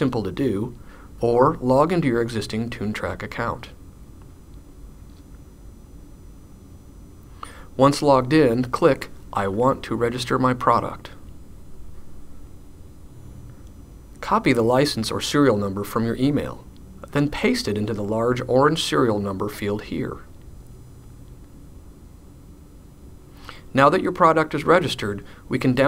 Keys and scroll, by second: 0.0-1.0 typing, 0.3 Down, 17.4 c, 19.9 super+v.